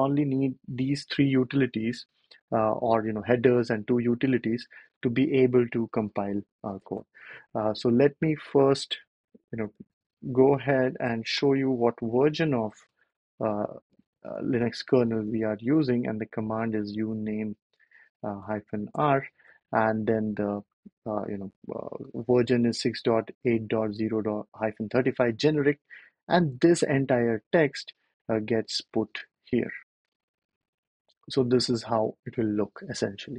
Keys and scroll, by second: 9.5 BackSpace, 9.8 ctrl+alt+super+p, 11.2 ctrl+l, 13.0-19.3 typing, 26.6 super+c, 31.7 super+v.